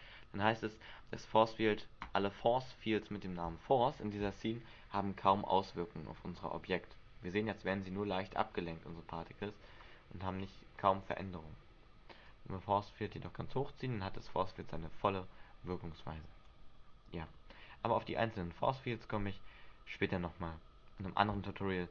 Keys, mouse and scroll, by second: 7.9 scroll down 1, 9.5 scroll down 2, 12.4 click.